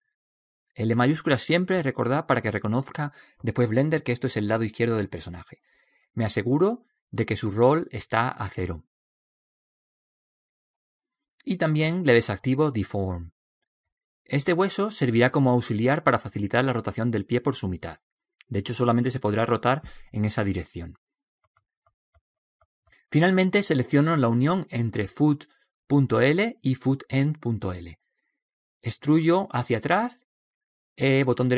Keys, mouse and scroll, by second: 6.5 click, 12.6-14.3 drag, 16.7-21.1 right drag, 24.7 right click, 29.4 e.